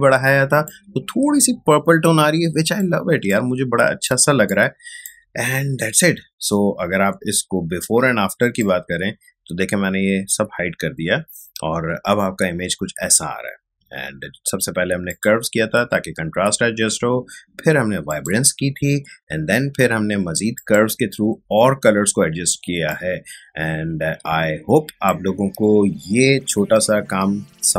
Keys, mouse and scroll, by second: 0.4 ctrl+space, 0.6 ctrl+click, 0.9 ctrl+space, 3.2-8.5 ctrl+drag, 8.5-15.0 drag, 15.0 click, 18.0 click, 20.5 click, 22.6 ctrl+space, 22.8-24.8 ctrl+drag.